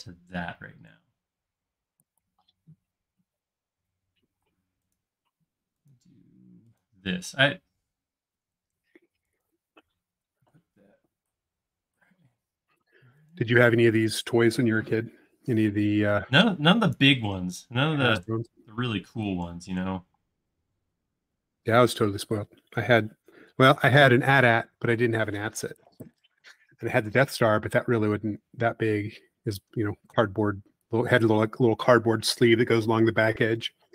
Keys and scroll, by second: 4.5 space, 7.2 m, 13.9 space, 16.0 e, 18.2 l, 20.2 space, 20.8 l, 23.8 l, 28.9 space, 29.3 l.